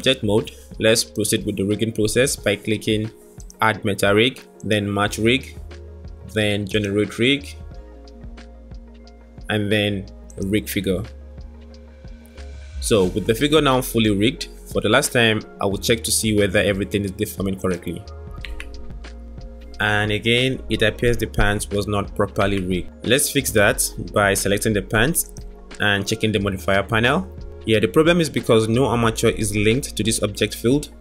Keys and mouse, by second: 3.3 click, 5.3 click, 8.6 click, 10.0 click, 13.7 click, 17.4 click, 18.6 g, 22.4 Tab.